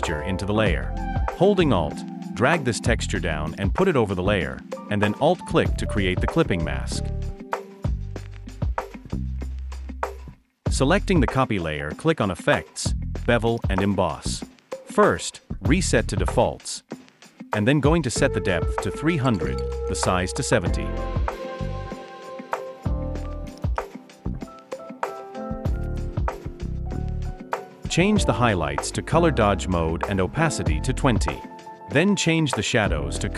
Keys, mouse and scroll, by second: 3.0 alt+click, 5.0 alt+click, 20.7-21.7 typing, 25.2-25.9 typing.